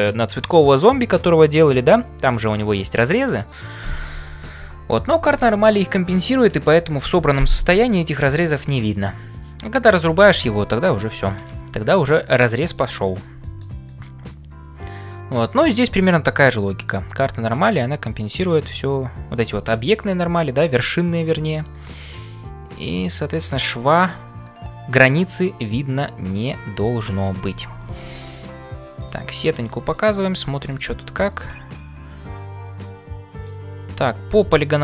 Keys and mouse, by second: 11.2 shift+middle click, 12.0 middle click, 13.4 shift+middle click, 13.8-15.2 middle drag, 15.7-17.0 middle drag, 19.3 middle click, 21.7-27.1 middle drag, 29.6 middle click, 31.3-33.6 middle drag.